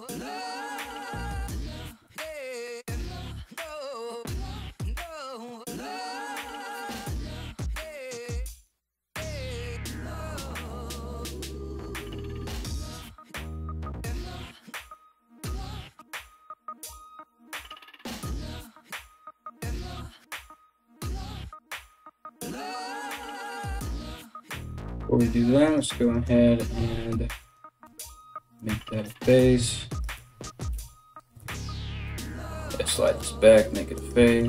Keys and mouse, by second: 0.5 right click, 1.1 f, 1.7 ctrl+z, 2.3 g, 2.7 g, 2.9 right click, 3.0 middle click, 3.0 g, 3.1 right click, 3.1 g, 3.5 right click, 3.7 shift+middle click, 3.8 right click, 3.9 alt+s, 4.3 right click, 4.6-12.4 typing, 4.8 middle click, 5.0 right click, 5.3 right click, 5.5 right click, 5.6 middle click, 6.2 right click, 6.3-7.5 middle drag, 6.5 right click, 6.7 right click, 7.5 right click, 7.6-15.9 middle drag, 8.4 right click, 9.2 right click, 9.6 right click, 11.4 right click, 12.3 right click, 12.8-27.1 ctrl+drag, 14.4 right click, 15.1 f, 16.1 ctrl+z, 25.2 right click, 25.6 shift+right click, 26.3 g, 27.1-34.4 middle drag, 27.4 f, 28.1 right click, 28.5 shift+right click, 29.2 ctrl+z, 29.7 right click, 30.3 f, 31.0 ctrl+z, 31.6 g, 32.8 f, 33.5 right click, 34.0 shift+right click.